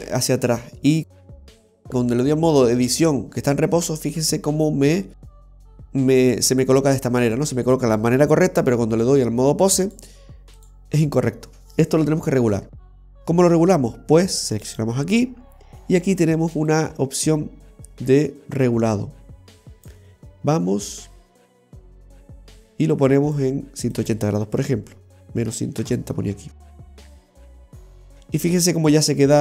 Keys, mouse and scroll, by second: 1.4 click, 9.9 click, 14.7 right click, 16.8 click, 21.1 click, 23.9 click.